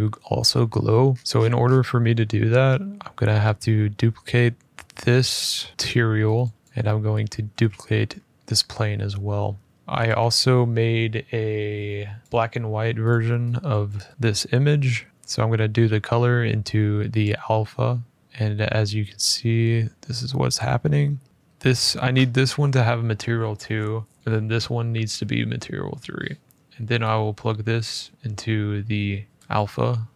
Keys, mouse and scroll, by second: 0.9-1.9 scroll up 15, 2.1 scroll, 6.2 click, 6.6 click, 6.6-7.3 scroll, 7.3 d, 8.3 Escape, 8.3-9.3 scroll, 9.7 click, 12.8 click, 13.6 click, 17.0 click, 18.2 click, 18.2 g, 19.4 middle click, 20.2 middle click, 21.2 scroll, 21.3 click, 24.2 click, 29.4 click.